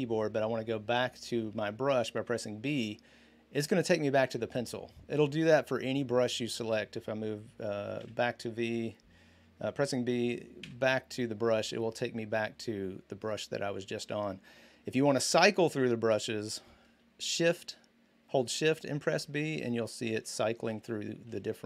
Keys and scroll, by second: 3.3 b, 7.8 v, 10.4 b, 18.2-21.6 typing.